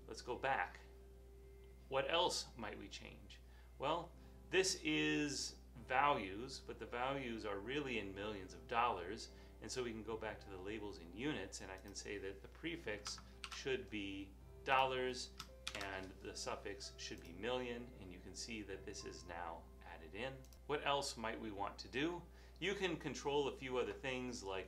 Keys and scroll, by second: 13.5 $, 15.9 m.